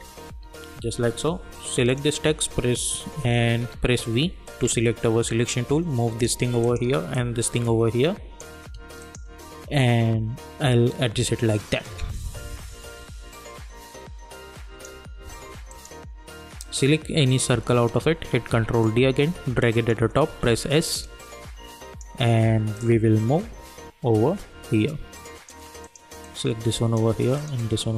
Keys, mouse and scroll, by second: 0.0-0.7 typing, 1.9 click, 3.8 v, 4.4-15.7 drag, 18.3 ctrl+d, 18.8-20.3 drag, 20.3 s, 21.0-27.3 drag.